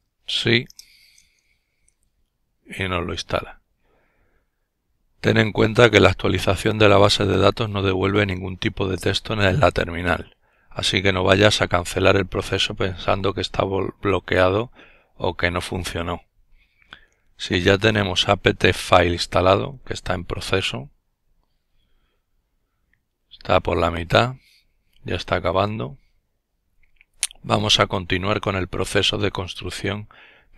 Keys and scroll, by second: 0.8-1.5 typing.